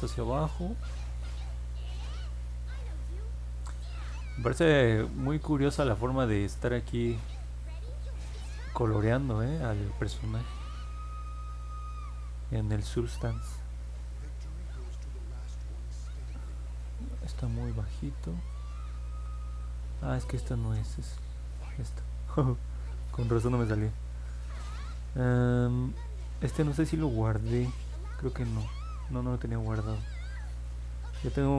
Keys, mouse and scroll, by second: 0.3 click, 1.5 middle click, 2.1 middle click, 5.4 click, 15.3-16.4 drag.